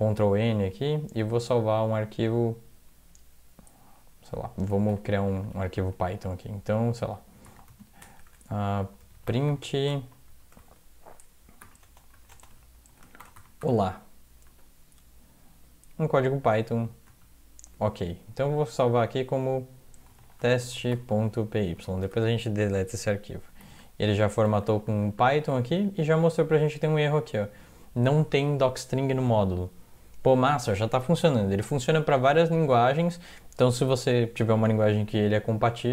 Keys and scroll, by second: 1.6 ctrl+s, 4.9 ctrl+=, 5.1 ctrl+=, 5.2 ctrl+=, 5.4 ctrl+=, 7.2-13.7 typing, 11.0 Left, 12.8 Left, 14.5 End, 17.1 ctrl+s, 19.9-22.3 typing, 23.8 ctrl+=, 24.3 ctrl+=, 24.5 ctrl+=, 24.6 ctrl+=, 25.8 Home, 35.2 alt+Tab.